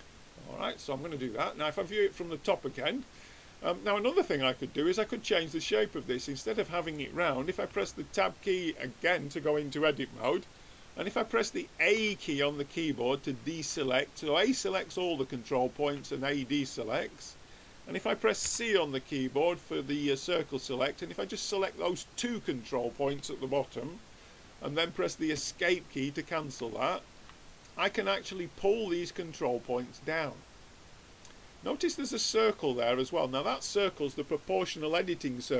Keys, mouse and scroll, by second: 0.7-2.5 drag, 7.7 Tab, 12.0 a, 13.5 a, 15.9 a, 16.8-18.8 middle drag, 18.4 c, 26.0-29.8 middle drag, 28.2-30.0 drag.